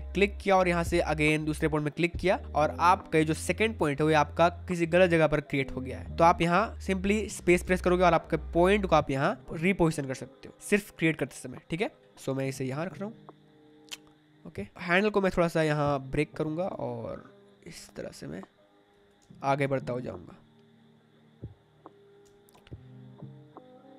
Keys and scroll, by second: 7.6 space, 19.1 space, 22.1 space.